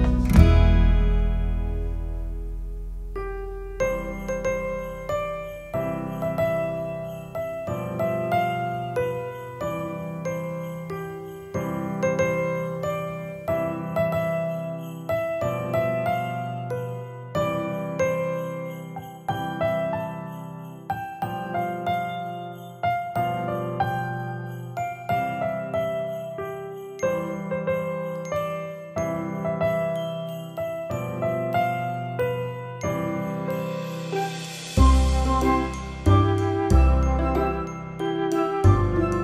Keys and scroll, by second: 4.8 Down, 10.5-11.4 typing, 13.3 1, 13.7 0, 14.0 Return, 14.9 9, 15.5 Return, 16.4 Down, 17.1 Up, 21.8 Return.